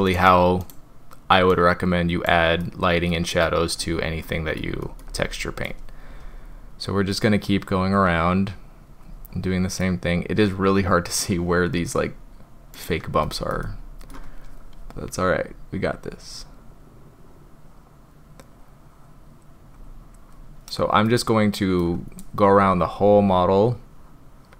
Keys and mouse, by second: 2.6 middle click, 3.4 shift+middle click, 4.3 middle click, 4.8 shift+middle click, 8.5-8.9 drag, 9.8-11.3 middle drag, 12.8 click, 13.3 shift+middle drag, 13.6 middle click, 16.0-19.4 drag, 19.8-20.2 drag, 21.1-21.8 middle drag, 23.1-24.5 drag.